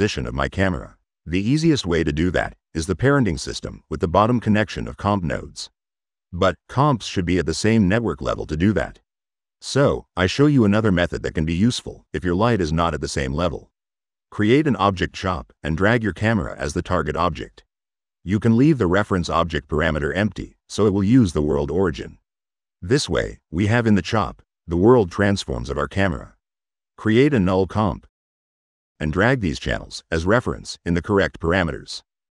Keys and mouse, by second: 3.7 click, 5.0-7.7 drag, 8.6 click, 9.5 click, 10.9 click, 12.7 o, 13.3 b, 14.3 click, 15.5 click, 17.2-18.4 drag, 20.9 middle click, 26.5 right click, 27.1 click, 27.7 click, 28.3 click, 29.8 middle click, 30.7 click, 30.9 click, 32.0 click.